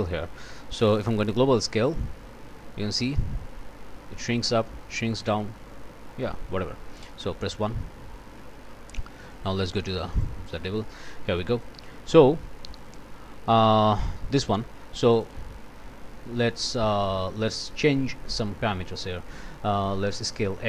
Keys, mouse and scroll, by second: 1.9-6.4 drag, 7.0 click, 7.8 1, 8.2 Return, 9.3 click, 10.1 click, 10.5 click, 11.3 click, 12.6 click, 15.0 click.